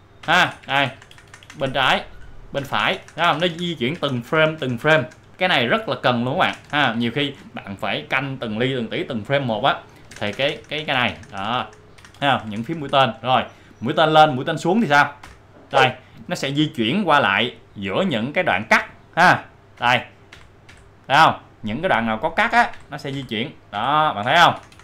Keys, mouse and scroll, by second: 0.2 Left, 2.6 Right, 6.5 Right, 10.1 Right, 15.2 Up, 18.7 Down, 19.8 Down, 22.7 Down, 23.8 Down.